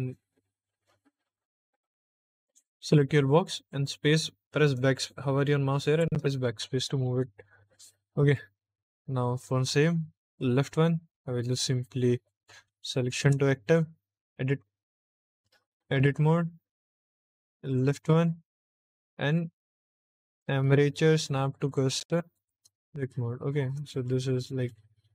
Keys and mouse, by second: 2.3 click, 5.9 BackSpace, 6.8 middle click, 7.3 shift+middle click, 9.3 click, 10.6 middle click, 12.6 shift+s, 14.1 Tab, 14.5 Tab, 15.3 click, 15.5 Tab, 17.7 click, 18.5 middle click, 20.2-21.7 drag, 22.4 Tab, 23.8 shift+middle click, 24.4 middle click.